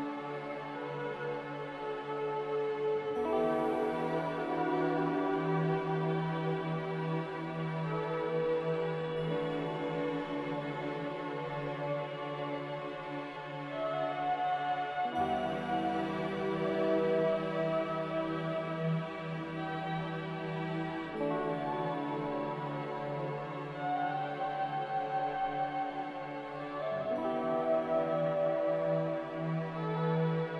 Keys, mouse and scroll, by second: 8.2 z, 20.7 z, 22.2 z, 24.5-27.0 typing, 29.3-30.5 typing.